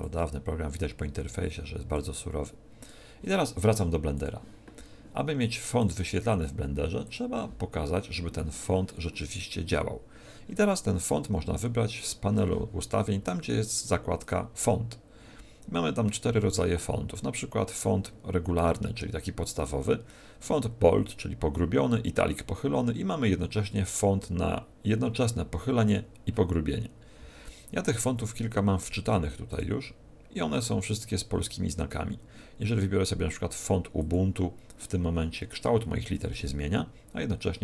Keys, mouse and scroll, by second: 13.7 click, 14.1 click, 29.5 click.